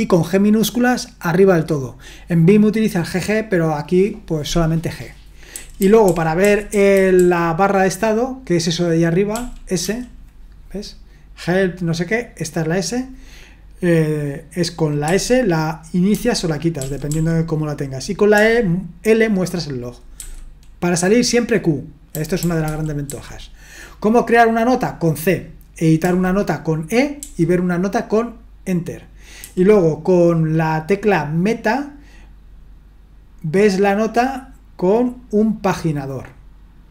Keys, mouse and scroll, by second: 5.5-7.2 typing, 9.3-9.8 typing, 15.1 typing, 16.1-17.1 typing, 18.3 typing, 20.2 typing, 22.1-23.1 typing, 26.0 typing, 27.2 typing, 29.4 typing.